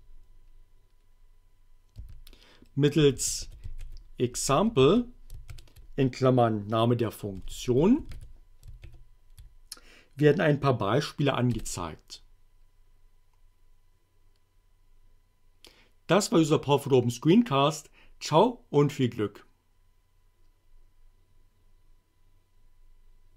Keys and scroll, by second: 2.0-5.5 typing, 7.2-8.8 typing, 11.5 Return.